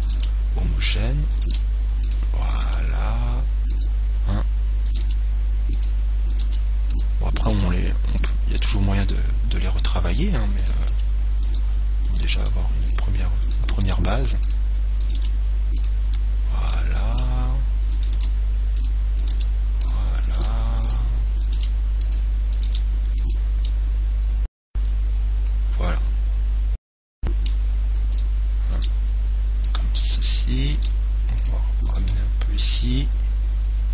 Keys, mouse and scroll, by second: 0.3 g, 0.5 g, 1.7 g, 2.9 g, 4.0 click, 4.3 click, 4.6 right click, 5.1 g, 5.7 click, 6.7 g, 7.7 g, 7.9 click, 7.9 right click, 10.3-15.6 right drag, 11.1 g, 12.6 g, 13.2-15.6 drag, 14.0 g, 15.4 g, 16.9 middle click, 18.5 middle click, 18.5 g, 19.5 g, 20.5 g, 21.7 g, 22.9 g, 23.8 click, 23.8 right click, 24.0-25.8 middle drag, 28.4 right click, 30.8-33.9 right drag, 30.8 g, 31.7 click, 32.2 g.